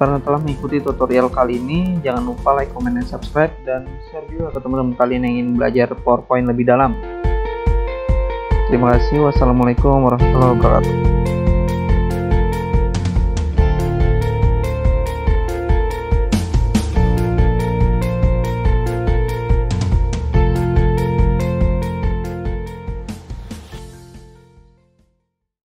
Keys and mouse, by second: 1.7 Escape, 2.4 click, 2.5 click, 3.1 click, 3.2 click.